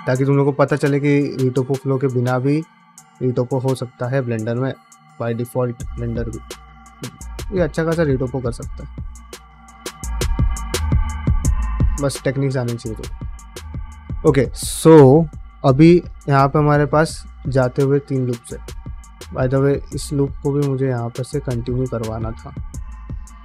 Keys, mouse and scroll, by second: 0.2 click, 0.3 g, 0.7 click, 0.9 g, 1.4 click, 1.6 g, 2.0 middle click, 2.9 click, 3.0 g, 3.4 click, 3.6 g, 4.1 click, 4.3 g, 4.8 shift+middle click, 5.4 click, 5.8 g, 6.3 click, 6.4 g, 6.8 click, 7.1 g, 7.5 click, 7.7 g, 8.1 middle click, 8.3 shift+middle click, 8.6 middle click, 9.0 click, 9.2 g, 9.8 click, 10.3 s, 11.0 g, 12.0 middle click, 12.3 shift+middle click, 12.6-15.6 middle drag, 16.4 click, 17.1 ctrl+click, 17.4 middle click, 18.6 click, 19.9 f, 21.5 middle click, 21.9 middle click, 22.9 click, 23.2 f.